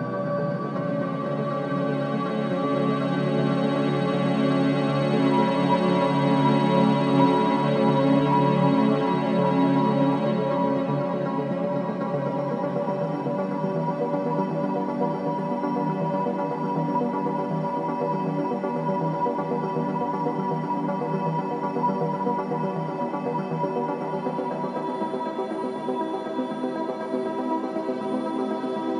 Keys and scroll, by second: 3.8 Delete, 5.3 Delete, 6.3 Delete, 8.6 Delete, 9.5 ], 13.4 5, 14.0 4, 19.8 F9, 21.5 3, 26.6 Delete.